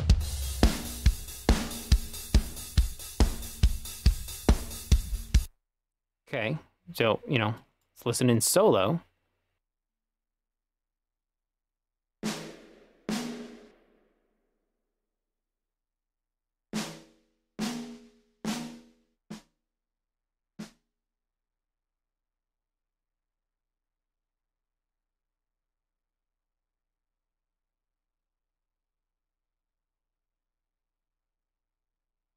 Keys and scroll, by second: 5.5 space, 9.9 space, 11.2 space, 11.7 space, 16.3 space, 22.6 space.